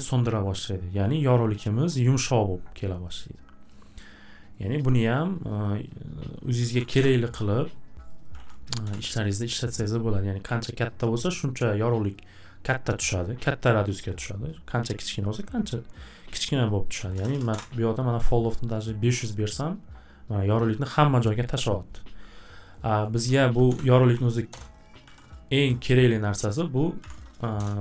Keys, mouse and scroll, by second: 3.8 right click, 4.6 right click, 4.8 right click, 5.5 click, 5.6 click, 6.3-8.9 typing, 8.1 click, 8.2 click, 16.2 click, 16.3 click, 16.7-17.6 typing, 22.7 click, 22.8 click, 23.0-25.5 typing, 24.8 click, 24.9 click, 26.4 click, 26.6 click, 26.8-27.8 typing.